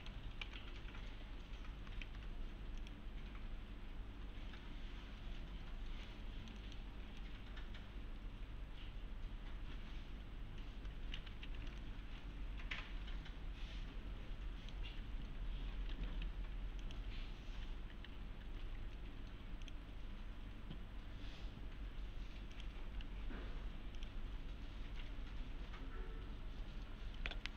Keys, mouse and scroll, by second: 0.5 c, 1.4-1.9 scroll down 1, 2.0 shift+f, 2.8 click, 6.1-6.9 middle click, 7.5-11.3 middle click, 11.3 F3, 11.8-14.9 middle click, 14.8 F3, 16.8 click, 17.9 F3, 19.6 click, 22.5 click, 22.8 F3, 24.0 click, 24.2 F3.